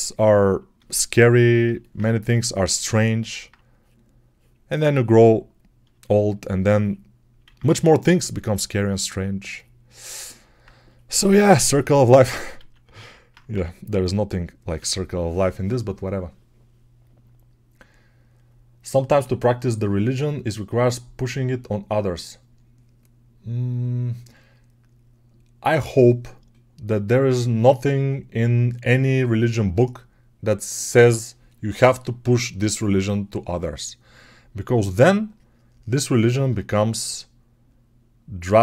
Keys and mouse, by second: 1.8-9.8 right drag, 7.3 ctrl+z, 12.0-38.6 alt+drag, 12.5 alt+q, 13.4 g.